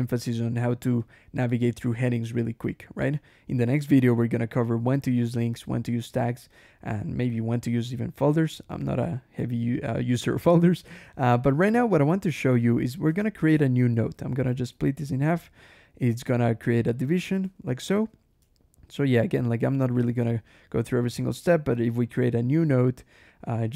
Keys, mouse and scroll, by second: 0.4 scroll up 1, 0.9 click, 1.3 click, 1.7 click, 2.0 scroll down 1, 3.0 click, 3.6 click, 5.8 scroll down 1, 6.4 click, 7.1 click, 8.0 click, 8.3 Escape, 8.5 g, 8.9 Escape, 9.2 j, 10.9 g, 11.5 j, 13.0 ctrl+shift+h, 14.3 ctrl+/, 15.1 click, 17.0 click, 17.3 Escape, 18.9 ctrl+Escape, 19.1 ctrl+k, 19.5 ctrl+g, 19.8 ctrl+Escape, 20.0 ctrl+j, 20.7 ctrl+k, 20.8 ctrl+j, 21.6 ctrl+n.